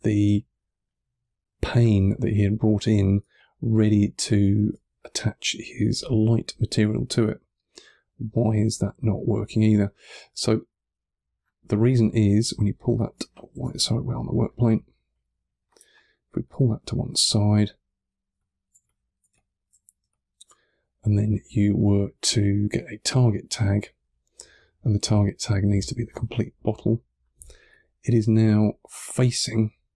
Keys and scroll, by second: 2.0 1, 3.1 3, 4.8 1, 13.4 super+z, 18.2 2, 18.7 1, 19.2 3, 27.5 2, 28.2 3.